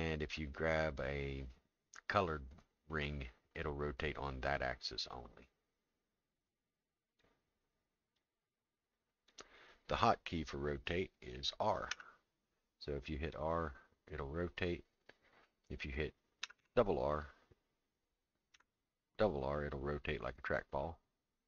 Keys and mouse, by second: 3.8-5.0 drag, 6.5 click, 8.2-9.3 drag, 11.9 r.